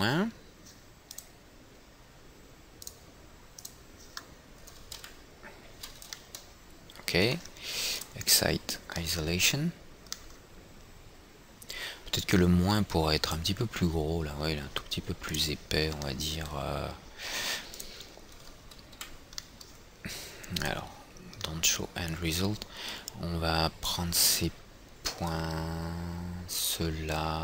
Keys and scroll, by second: 5.5 F4, 19.5 F4.